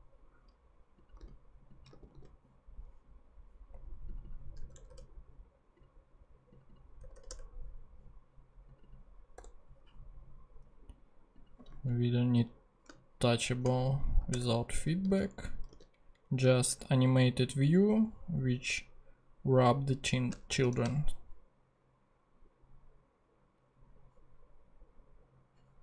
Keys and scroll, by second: 0.6 super+x, 4.6 BackSpace, 7.0 BackSpace, 9.3 0, 12.0 super+Left, 12.9 shift+super+Left, 14.3 shift+BackSpace, 15.0 super+BackSpace, 15.3 super+Down, 15.7 super+x, 16.1 super+Up, 16.5 shift+Tab, 20.6 shift+super+p.